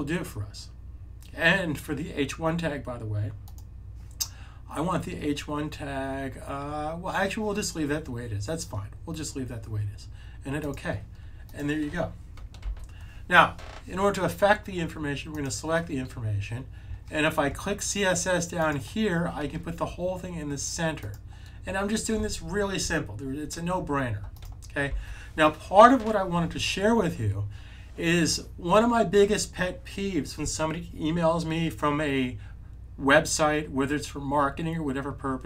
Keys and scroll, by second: 12.5 super+s, 24.8 super+s.